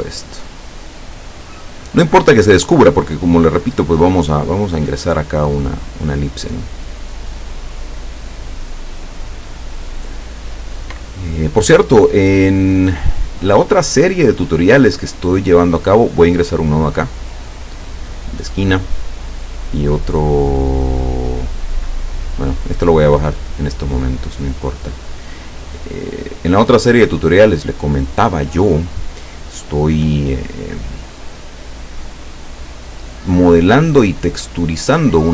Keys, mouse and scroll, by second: 7.3-9.9 drag, 15.9 click, 18.2 click, 23.2-28.8 drag, 30.0 click, 30.6-31.9 drag, 32.7-35.0 drag.